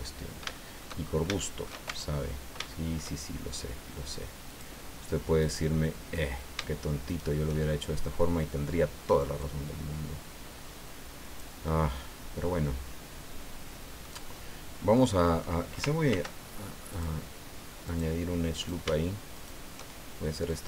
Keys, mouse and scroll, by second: 0.1 scroll down 2, 0.6 shift+middle click, 1.1 shift+scroll up 2, 1.4 shift+middle click, 1.9 shift+Tab, 2.2-2.6 shift+scroll up 4, 2.6 shift+middle click, 2.6 shift+click, 4.5 click, 5.4 right click, 7.1 shift+right click, 9.4-11.6 drag, 11.7-14.2 middle drag, 14.9 middle click, 16.1 ctrl+r, 16.9 click, 17.9 click, 18.5 right click, 19.3 shift+right click, 20.5-20.6 drag.